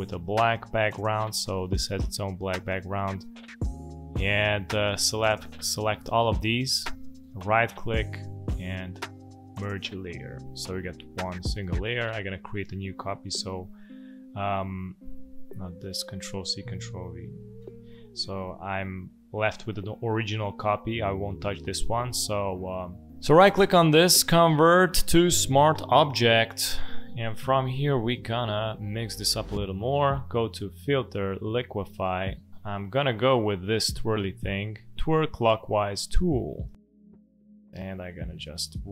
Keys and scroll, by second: 13.2 ctrl+c, 13.4 ctrl+f, 14.6 Escape, 17.2 ctrl+c, 17.4 ctrl+v, 28.1 space.